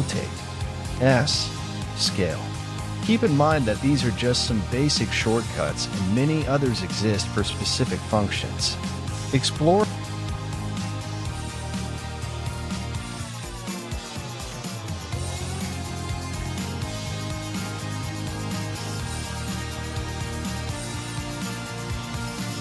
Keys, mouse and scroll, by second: 10.0 g, 12.7 r, 15.8 s, 19.7 ctrl+z.